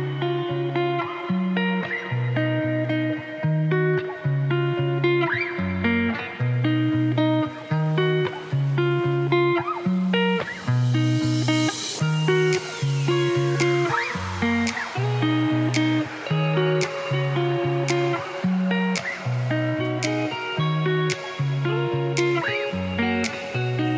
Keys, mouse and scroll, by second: 0.4 click, 1.6-2.6 drag, 4.1 click, 5.3 click, 6.0 Tab, 6.3 click, 6.6 scroll up 3, 7.6 click, 9.7 Tab, 10.1 middle click, 10.2-10.7 scroll down 4, 10.7 middle click, 11.0 click, 11.7-14.9 drag, 14.9 scroll down 4, 15.1 middle click, 15.5 scroll up 3, 15.7 middle click, 16.0 click, 16.8 click, 17.6 click, 18.6 click, 19.5 click, 19.8-20.5 scroll up 2, 19.8 middle click, 20.5 click, 21.1 click, 21.9 click, 22.0 scroll down 4, 22.1 middle click, 22.7 click.